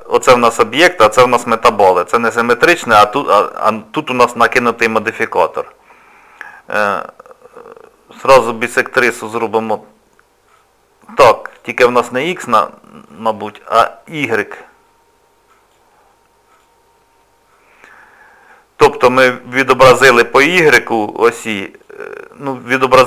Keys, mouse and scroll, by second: 10.5 click, 11.5 click, 13.1 click, 15.5 click, 16.5 click, 21.8 click, 22.7 click.